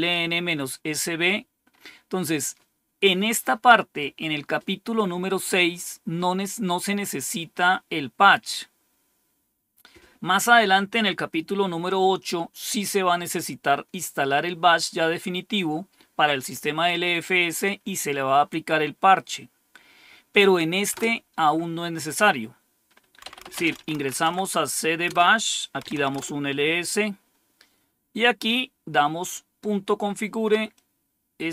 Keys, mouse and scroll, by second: 20.8 Return, 22.9-24.4 typing, 25.0 Return, 25.5-26.2 typing, 30.7-31.5 drag.